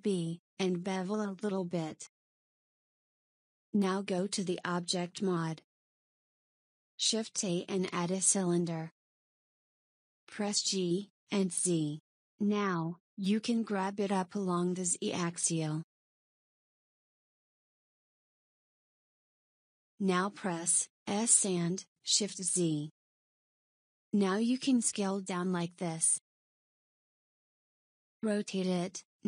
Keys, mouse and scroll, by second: 0.5 ctrl+b, 4.5 Tab, 7.1 click, 8.0 shift+a, 11.5 g, 17.4-19.6 shift+middle drag, 19.6 s, 26.4 r.